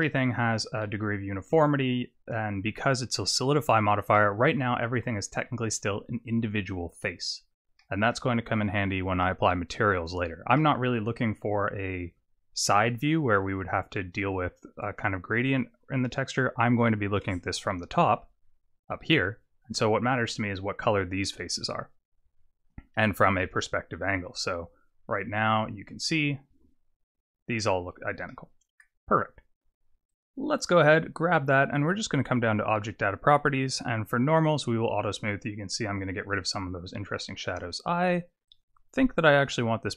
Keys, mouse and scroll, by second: 0.0 middle click, 1.1-1.5 scroll up 4, 1.9-2.9 scroll down 2, 3.8 click, 4.1 middle click, 5.4 Tab, 5.4 scroll down 1, 7.8 middle click, 8.5-10.5 scroll up 2, 10.5 middle click, 17.7 KP_7, 18.5-20.7 scroll down 4, 21.4-23.4 scroll up 5, 23.4 KP_0, 26.5 Tab, 28.3 middle click, 29.4 scroll up 6, 30.1 click, 32.2 click, 33.6 click, 34.5 click, 37.4 click, 38.5 click, 39.4 click.